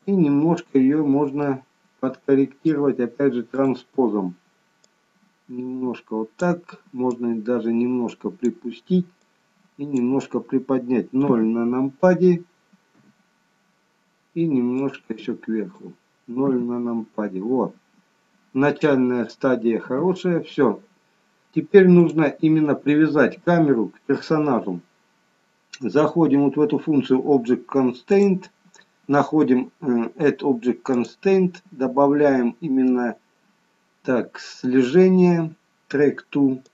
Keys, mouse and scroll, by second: 0.8-1.4 scroll up 1, 1.4 middle click, 3.5 click, 4.8 click, 7.0 click, 9.2 click, 11.2 KP_0, 12.9 KP_0, 14.7 click, 16.4 KP_0, 19.8 KP_0, 21.9 click, 28.0 click, 30.9 click.